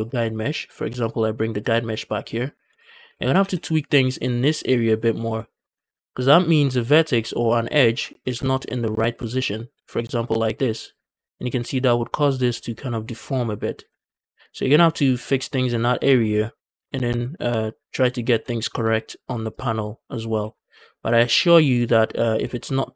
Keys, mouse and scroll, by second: 1.2 click, 2.1 click, 2.8 Tab, 3.0 shift+middle click, 3.2 z, 5.2 shift+middle click, 5.6 z, 6.1 click, 8.3 alt+s, 8.6 alt+d, 10.9 click, 14.2 ctrl+z, 15.9 z, 16.3 scroll down 2, 16.5 shift+middle click, 17.2 Tab, 17.7 click, 18.1 z, 19.3 click, 20.2 z, 21.6 click, 22.1 z.